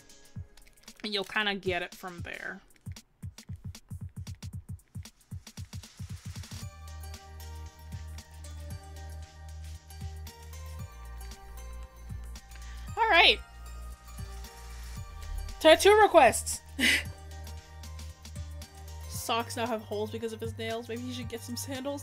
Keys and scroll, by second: 13.0 scroll down 1.